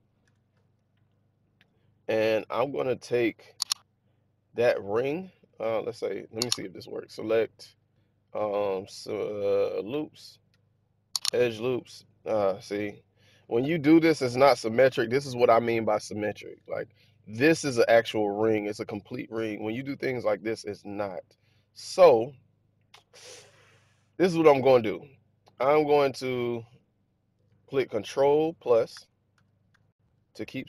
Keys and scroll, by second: 0.1 Tab, 28.9 ctrl+=, 29.4 ctrl+=, 29.6 ctrl+=.